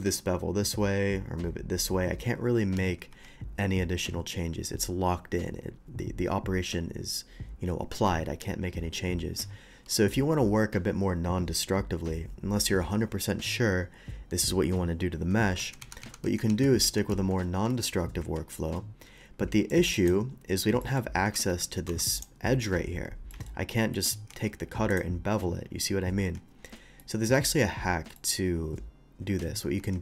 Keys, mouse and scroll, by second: 3.2 Tab, 15.6 ctrl+z, 15.8 ctrl+z, 16.8 ctrl+z, 18.2 q, 19.7 click, 19.9 click, 20.8 middle click, 21.5 s, 21.5 x, 22.2 click, 22.2 y, 23.3 middle drag, 23.9 middle drag, 24.3 Tab, 24.9 click, 26.6 scroll down 1, 27.0 middle drag, 28.2 middle click.